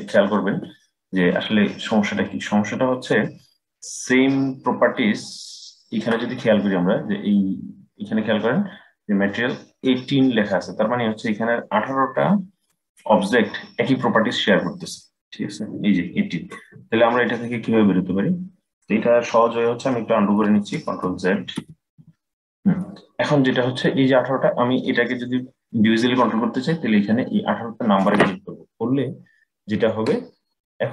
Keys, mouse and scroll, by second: 7.0-8.9 scroll down 1, 20.2 ctrl+z, 20.6 ctrl+z, 20.9 ctrl+z, 21.3 ctrl+z, 21.7 ctrl+z, 27.7-30.8 drag.